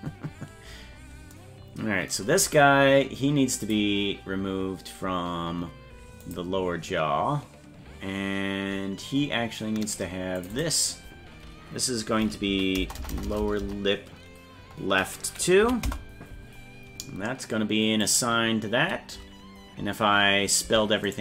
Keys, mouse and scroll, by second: 3.6 click, 6.2 click, 9.8 click, 10.4 click, 10.5-16.3 drag, 12.9 BackSpace, 13.1 BackSpace, 13.5 BackSpace, 13.7 BackSpace, 18.0 click, 20.6 Tab, 21.1 right click.